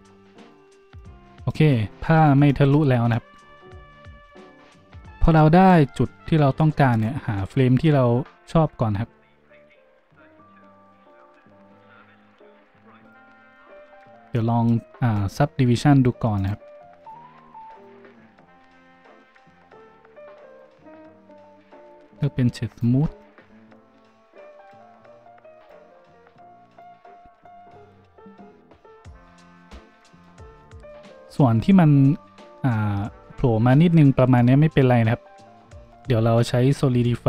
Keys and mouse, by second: 16.5-17.0 middle drag, 17.0 click, 17.1-17.8 middle drag, 17.8-37.2 drag, 23.0 shift+w, 24.6 middle click, 24.6 right click.